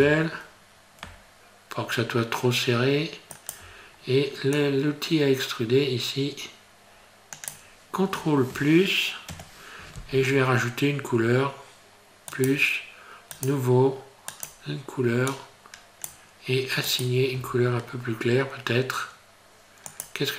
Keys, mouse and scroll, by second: 0.0 s, 4.6 click, 9.3 ctrl+KP_Add, 12.3 click, 13.4 click, 14.3 click, 16.9 click, 17.4 Tab, 17.8 scroll down 2, 20.0 click.